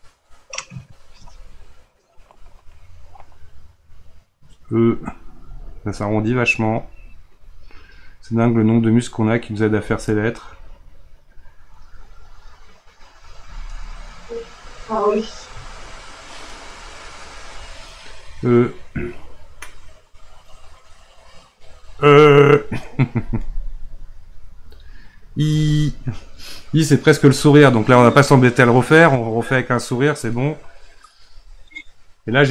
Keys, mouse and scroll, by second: 2.4-5.4 middle drag, 6.1 click, 23.5-26.5 middle drag, 30.4-32.5 middle drag.